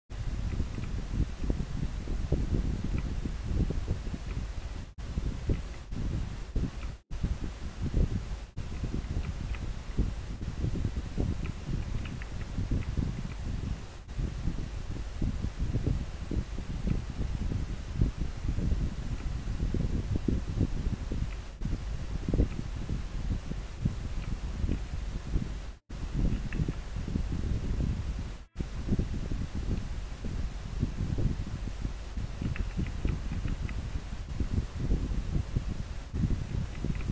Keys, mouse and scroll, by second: 0.6 scroll down 1, 5.6 scroll down 1, 8.8 scroll down 1, 9.7 scroll up 1, 12.9 scroll up 1, 32.8 scroll down 1, 33.7 scroll up 1, 36.7 scroll down 1.